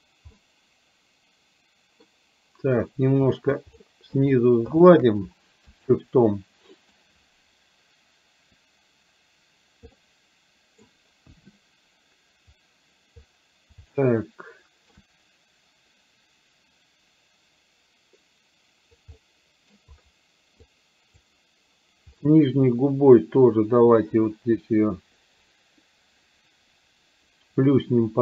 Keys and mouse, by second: 0.3-2.1 middle drag, 3.6 shift+click, 4.2 shift+click, 4.7 shift+click, 5.9-6.9 middle drag, 10.1 middle click, 11.3 KP_1, 13.9 shift+middle click, 14.8 shift+middle click, 19.2 middle click, 19.7 middle click, 20.7 click, 22.7-28.2 drag.